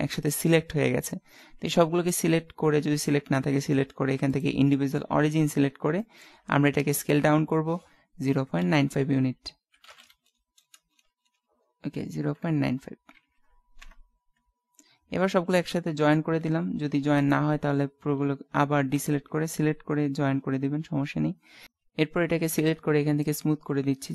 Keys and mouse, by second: 4.4-5.8 drag, 6.1-7.3 middle drag, 6.8 s, 15.8 ctrl+j, 17.3-19.2 right drag, 18.3 a, 19.0 a, 20.2 ctrl+j.